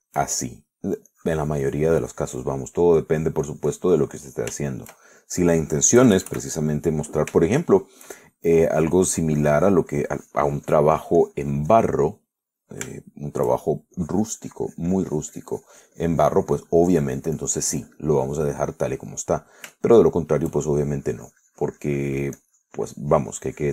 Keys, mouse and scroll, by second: 0.0-1.0 shift+middle drag, 1.1 shift+middle click, 2.3-5.7 drag, 5.8 shift+middle click, 7.2 KP_Add, 8.7 shift+middle click, 9.9-13.3 drag, 13.3 middle click, 14.2 shift+middle click, 15.4-21.0 drag, 21.1 shift+middle click, 22.1-23.7 shift+drag.